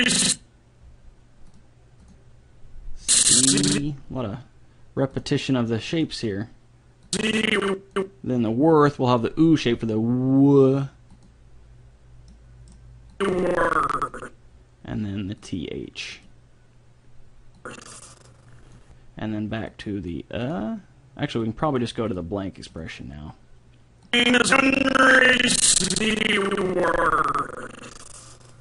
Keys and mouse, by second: 1.6-4.8 drag, 5.0 middle click, 5.2-8.8 drag, 9.1-10.9 drag, 11.1-12.8 drag, 13.2 click, 15.4-19.2 drag, 19.7-25.8 drag.